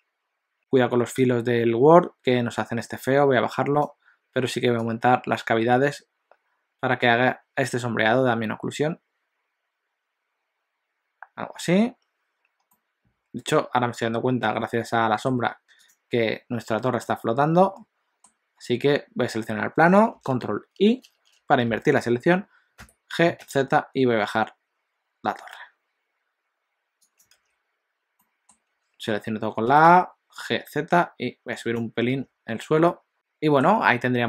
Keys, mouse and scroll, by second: 12.7 middle click, 16.3 click, 17.2 middle click, 21.2 ctrl+i, 22.8 g, 27.5 alt+a, 28.3 middle click, 28.8 a, 29.8 g, 32.2 alt+a, 32.5 scroll down 2, 33.0 middle click, 33.1 middle click, 33.1 scroll up 2.